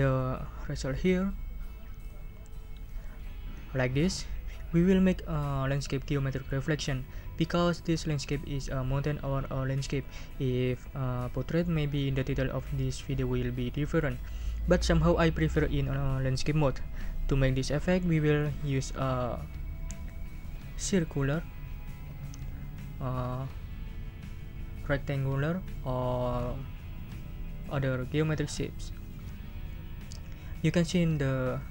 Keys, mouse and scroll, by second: 2.0 click, 24.0 scroll down 2.